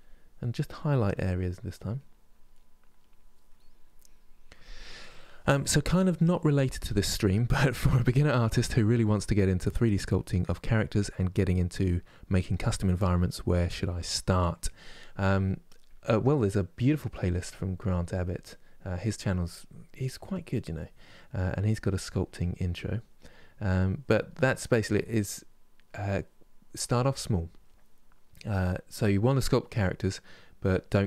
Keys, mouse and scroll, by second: 0.1 middle click, 0.5 click, 1.2 middle click, 1.7 click, 2.2 middle click, 2.7 click, 3.3 middle click, 3.7-14.9 drag, 14.9-16.4 middle drag, 16.4 click, 17.3 middle click, 17.6 click, 18.2 middle click, 18.6-19.8 drag, 19.8 middle click, 20.3 click, 21.1 middle click, 21.6 click, 22.0 middle click, 22.4 click, 23.0 middle click, 23.4 click, 24.1 middle click, 24.5 click, 25.2 middle click, 25.6-28.0 drag, 28.0-29.0 middle drag, 29.0-31.0 drag.